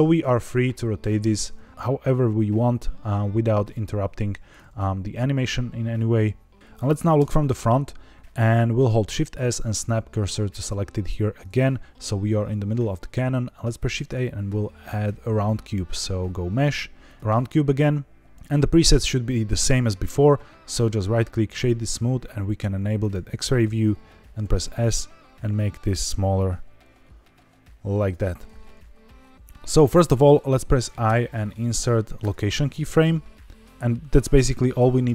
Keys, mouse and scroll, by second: 0.0 r, 0.2 z, 0.9 Escape, 3.5 click, 7.1 KP_1, 9.0 shift+s, 13.8 shift+a, 20.8-21.6 right drag, 22.9 click, 24.3 s, 27.9 click, 28.8 scroll down 2, 31.0 i, 34.6-35.1 scroll up 2.